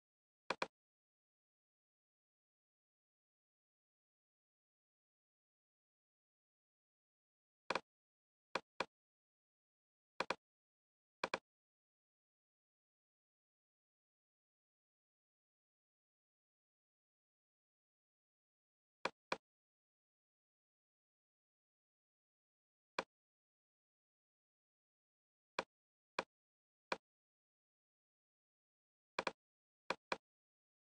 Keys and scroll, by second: 14.4 End, 16.6 super+Tab.